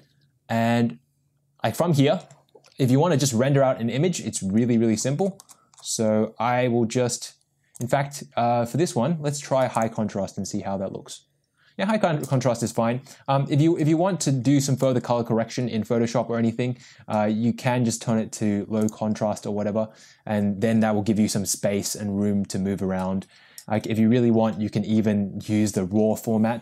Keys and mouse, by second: 7.8-9.9 drag, 12.6-19.2 drag.